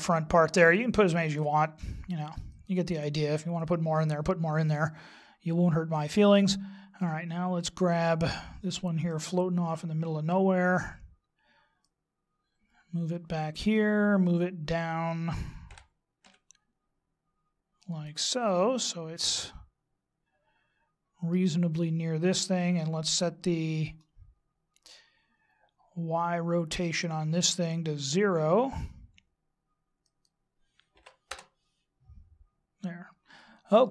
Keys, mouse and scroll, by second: 2.5 click, 4.7 middle click, 6.9 middle click, 10.6 right click, 11.9 click, 15.7 g, 18.4 middle click, 22.3 click, 24.0-25.7 scroll up 14, 25.7 scroll up 4, 30.0 click.